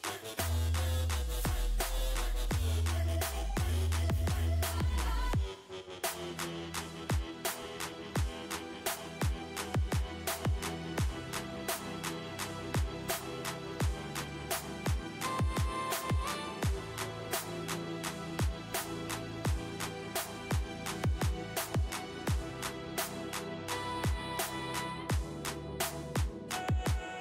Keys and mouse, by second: 7.1 KP_5, 8.5 z, 9.1 z, 13.7-15.9 drag, 17.5-19.5 drag, 24.9 ctrl+z.